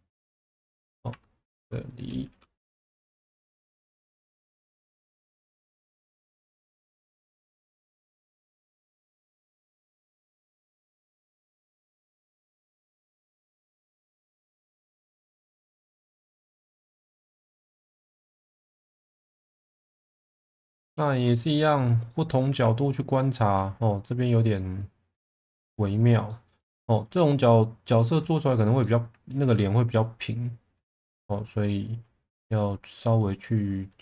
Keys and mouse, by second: 1.1 2, 1.9 shift+click, 2.7 f, 3.5 2, 3.7 click, 4.8 e, 5.8 e, 7.4 click, 7.6 e, 8.2 click, 10.6 shift+click, 11.0 f, 11.7 shift+click, 12.1 f, 12.9 shift+click, 13.1 f, 13.5-17.9 middle drag, 18.1 1, 18.9 click, 20.1-20.4 middle drag, 20.5 2, 20.7 click, 21.1-21.5 middle drag, 22.0 middle drag, 22.4 1, 23.3 middle drag, 26.2 middle click, 26.9 click, 27.5 click, 28.8 middle click, 29.8 click, 32.3 click, 33.9 click.